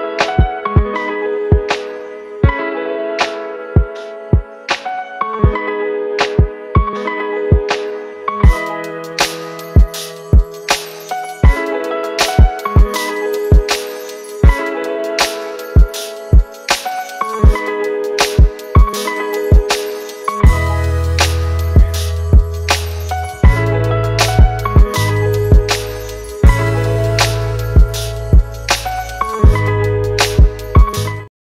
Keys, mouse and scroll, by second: 1.5 click, 1.6 click, 4.2-6.0 drag, 9.4 click, 12.8 click, 12.9 click, 15.1-17.2 drag, 22.8 right click, 24.1-27.0 drag, 27.0 z, 27.5 click, 27.8 click, 30.6 z.